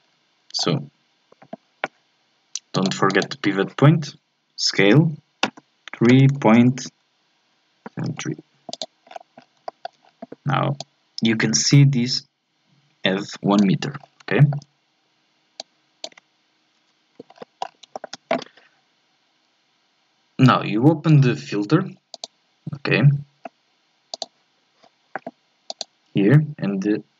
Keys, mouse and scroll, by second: 0.0-0.6 scroll down 4, 0.6-2.7 scroll up 1, 2.7-5.4 drag, 5.4 s, 9.1-9.7 scroll down 6, 9.7 shift+middle click, 10.0 scroll up 1, 10.8 click, 14.0 scroll down 3, 14.4-15.6 shift+middle drag, 15.6-16.8 drag, 16.8 Delete, 17.3-17.9 scroll down 6, 17.9-20.4 shift+middle drag, 20.4-27.1 drag.